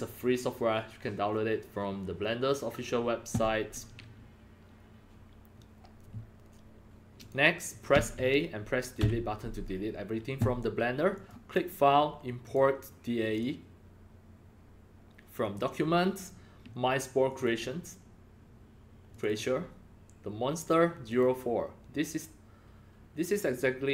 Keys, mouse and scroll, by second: 7.2 click, 7.9 a, 8.9 Delete, 11.1 click, 12.4 click, 13.3 click, 15.4 click, 17.2 click, 17.4 click, 19.1 click, 19.2 click, 21.0 click.